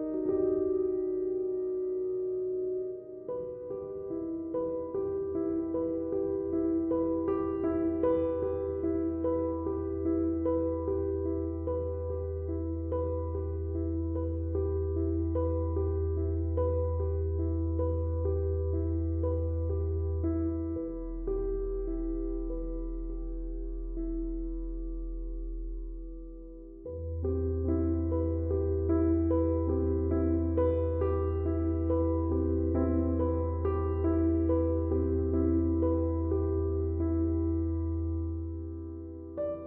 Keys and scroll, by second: 1.3 4, 10.5 3, 12.5 ctrl+z, 16.5 ctrl+d, 16.7 Escape, 23.0 4, 24.0 3, 25.0 4, 27.8 ctrl+d, 27.9 Escape, 28.7 ctrl+z, 37.6 ctrl+d, 37.7 Escape.